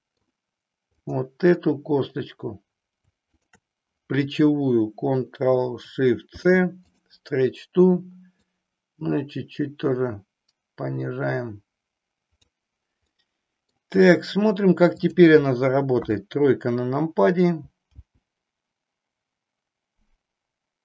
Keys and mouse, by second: 1.0 click, 3.3 shift+click, 6.1 ctrl+shift+c, 8.4-12.5 drag, 13.0 middle click, 15.0 click, 16.5 KP_3, 17.9 g.